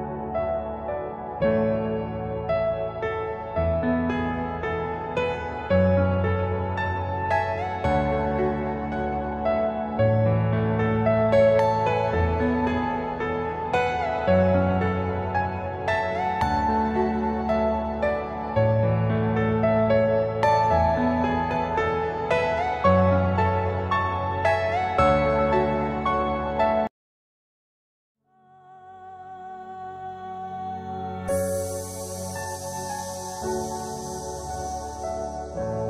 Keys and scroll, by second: 8.2-9.2 typing, 13.2 KP_Add, 17.3-18.2 typing, 20.6 ctrl+Page_Down, 21.4 F4, 22.0 Escape, 23.4 Delete, 25.9 F2, 27.4 F7, 28.4 space, 28.5 F4, 31.9 shift+F2.